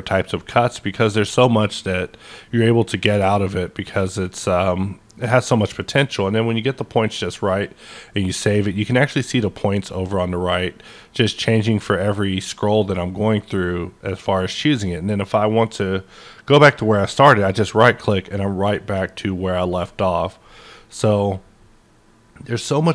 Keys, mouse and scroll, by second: 0.3-0.8 scroll up 1, 0.8-1.5 scroll up 1, 1.5-2.2 scroll up 2, 2.2 scroll up 1, 2.9 scroll up 1, 3.7-4.5 scroll up 2, 4.5-5.1 scroll up 1, 5.4-6.0 scroll down 1, 6.0-7.2 scroll up 2, 7.2-7.7 scroll up 1, 8.0-8.6 scroll up 1, 10.1-11.0 scroll up 3, 11.1-11.5 scroll up 2, 12.7-13.1 scroll up 1, 17.4 right click, 17.4-18.4 scroll up 1, 20.3 right click, 20.3-22.8 middle drag.